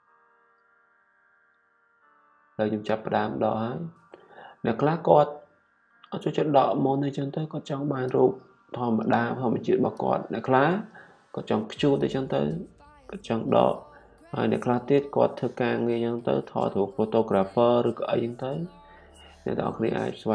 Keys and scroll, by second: 1.1 typing.